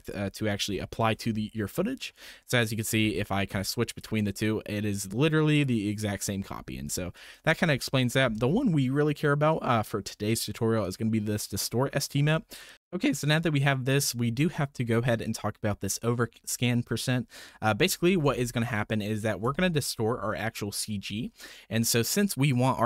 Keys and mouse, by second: 0.0 click, 0.6 m, 3.9 ctrl+shift+click, 5.5 ctrl+shift+click, 10.8-12.2 ctrl+shift+drag, 12.7 click.